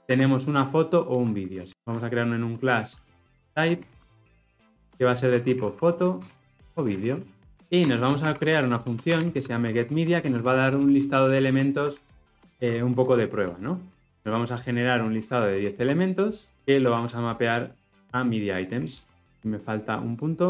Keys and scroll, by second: 1.1 Return, 19.2 ctrl+alt+o.